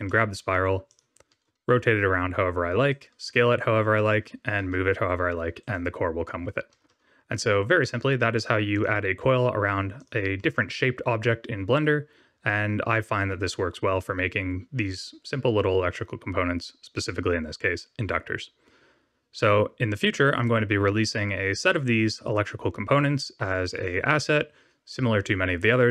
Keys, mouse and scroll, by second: 0.0 middle click, 0.8 click, 1.2 r, 3.2 s, 4.5 g, 6.6 r, 9.9 click, 10.3 middle click, 13.6 scroll down 1.